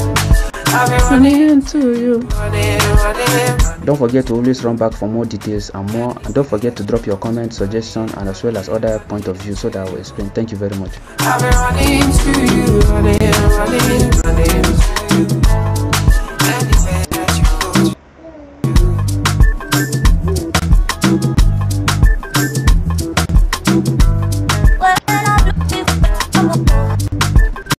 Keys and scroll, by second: 1.0 ctrl+c, 2.1 ctrl+c, 3.4 ctrl+c, 11.7 f, 12.5 Tab, 14.5 Tab, 14.7 \, 16.1 Right, 16.7 Left, 17.0 Left, 25.4-27.8 typing, 26.9 Escape.